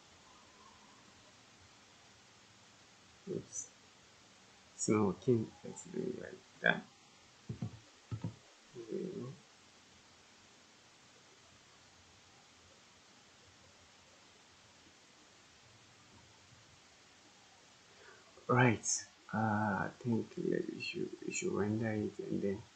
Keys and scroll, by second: 7.4 0, 8.1 Return, 10.2 typing.